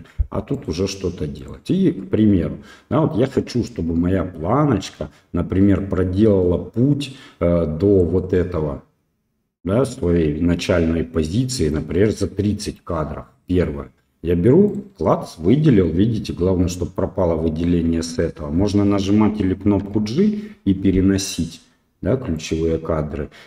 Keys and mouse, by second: 0.5 click, 1.4 click, 8.0-9.9 drag, 11.7-12.7 drag, 14.6 right click, 19.8 g.